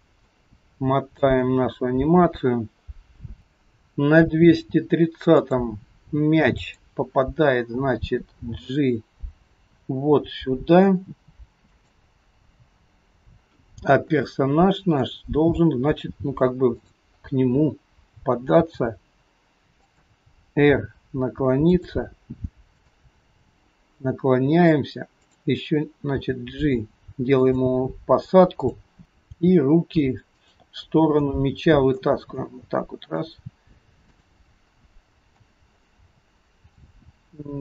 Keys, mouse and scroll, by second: 0.3 middle click, 1.5-2.1 scroll up 2, 5.4 click, 6.6 click, 8.6 g, 13.7-14.1 scroll up 2, 14.2 shift+middle click, 15.3-15.9 scroll up 2, 15.9-16.8 scroll down 2, 16.8 click, 18.7 g, 20.7 r, 22.8 click, 23.4 r, 25.3 click, 26.2 g, 28.6 click, 29.4 g, 31.2 middle click, 32.4 scroll up 1, 32.5 middle click, 34.2 click, 34.9 middle click, 35.6 scroll down 2, 35.9 middle click, 37.0 g.